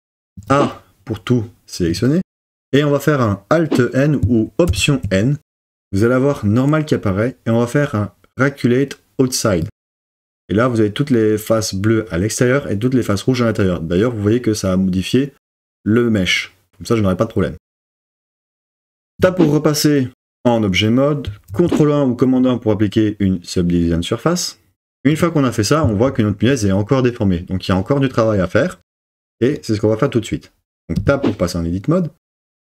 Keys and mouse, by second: 0.3 a, 4.7 alt+n, 19.2 Tab, 21.5 super+1, 25.1 click, 31.0 Tab, 32.4 z.